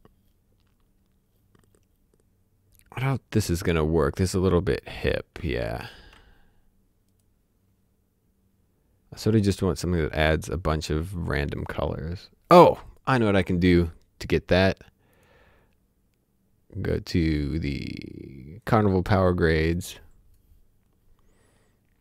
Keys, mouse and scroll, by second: 4.2 click, 5.9 ctrl+z, 7.1 right click, 12.8 click, 15.1 click, 18.6 click.